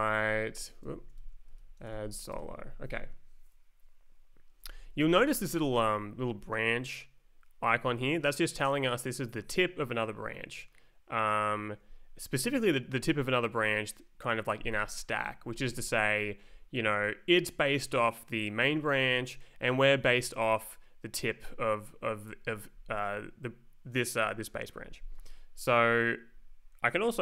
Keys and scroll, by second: 0.0-2.7 typing, 0.8 Escape, 4.6 Down.